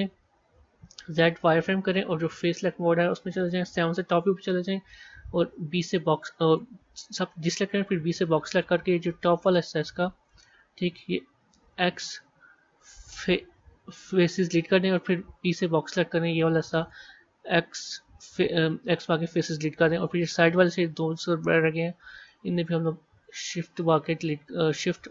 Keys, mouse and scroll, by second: 2.5 click, 3.8 KP_7, 9.7-11.6 scroll up 4, 19.7-20.8 middle drag, 20.8 scroll up 2, 22.2 middle click, 23.1 click.